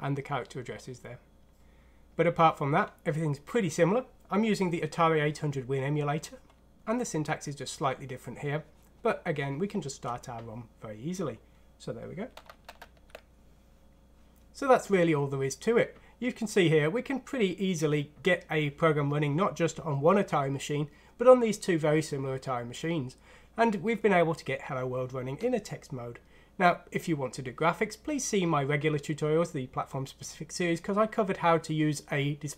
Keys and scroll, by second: 12.6 ctrl+1.